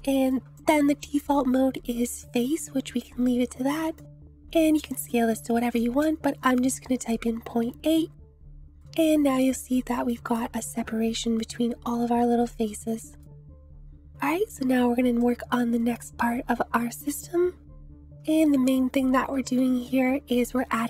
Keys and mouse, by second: 0.2 click, 4.0-7.2 drag, 8.7-9.0 shift+drag, 10.1-11.4 drag, 12.8-13.2 drag, 15.2 click, 19.3 shift+a.